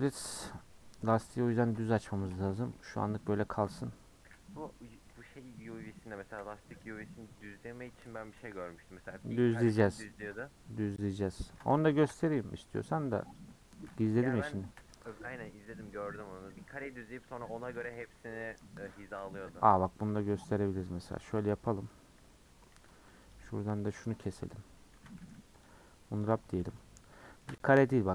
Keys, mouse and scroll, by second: 0.2 u, 2.2 Tab, 2.8 /, 3.4-4.0 scroll down 9, 4.0 scroll up 2, 4.2 /, 4.5-5.9 scroll down 9, 5.9-6.4 scroll down 1, 6.4 h, 6.8 click, 9.7 /, 10.2-12.1 middle drag, 12.1 /, 13.8 middle drag, 14.1-14.7 scroll up 1, 14.7 /, 15.1 scroll up 1, 15.2 middle drag, 15.5-15.9 scroll down 5, 15.9 Tab, 16.0-18.9 middle drag, 21.6 middle click, 21.9-22.3 scroll up 4, 22.4 middle click, 23.3 alt+Left, 24.6 scroll down 3, 24.9 a, 25.8 u, 26.2 click, 26.6 3.